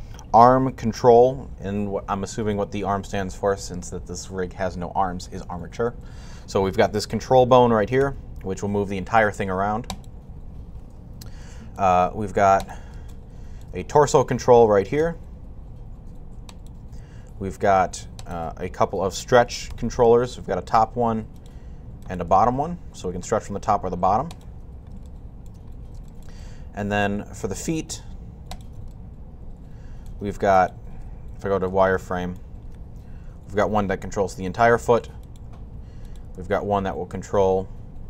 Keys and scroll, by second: 7.8 g, 14.8 g, 30.5-31.2 typing, 33.2-33.9 typing, 36.2 typing.